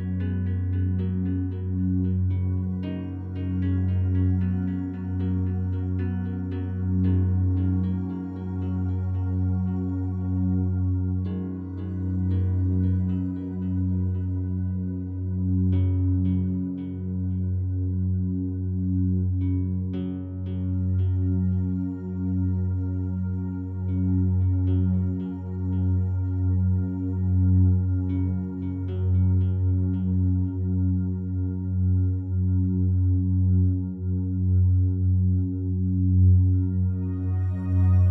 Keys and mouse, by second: 1.4 click, 2.0 click, 7.9 click, 8.8 ctrl+alt+click, 10.0 ctrl+alt+click, 10.0 typing, 11.2 typing, 14.1 click, 15.7 click, 16.9 g, 17.2 y, 18.1 click, 18.7 click, 19.7-20.5 typing, 21.6 click, 22.3 alt+shift+click, 23.4 alt+shift+click, 24.3 click, 25.0 click, 25.9 alt+click, 26.9-28.9 alt+drag, 29.5 alt+shift+click, 29.9 ctrl+alt+click, 30.6-31.9 alt+drag, 32.8 click, 34.8 alt+shift+click, 35.5 ctrl+click, 35.9 click.